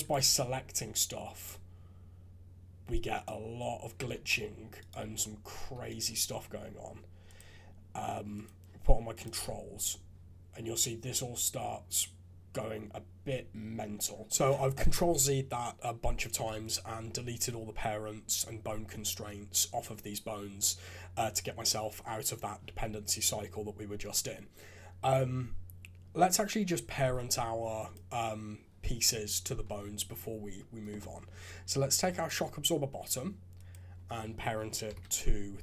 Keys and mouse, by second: 0.0-0.2 typing, 4.0 shift+z, 4.2 g, 5.0 shift+z, 5.6 g, 8.3 click, 9.1 click, 9.3 g, 16.6 click, 26.9 ctrl+Tab, 32.2 click, 33.6 click, 34.8 ctrl+p.